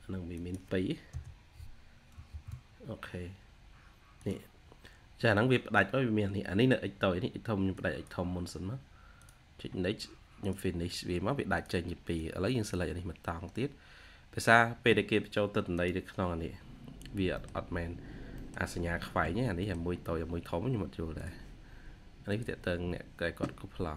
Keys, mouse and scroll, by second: 0.7-2.7 typing, 17.2 middle click, 17.7-18.1 scroll up 1, 18.3 middle click, 19.2-19.8 scroll down 2, 19.5 middle click.